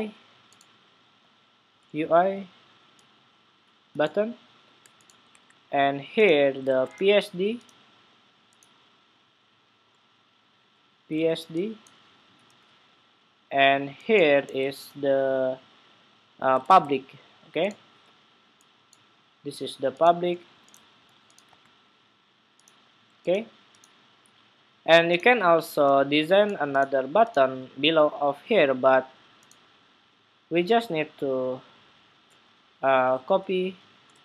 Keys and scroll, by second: 5.0 super+Tab, 6.5 super+Tab, 14.1 super+Tab, 16.3 super+Tab.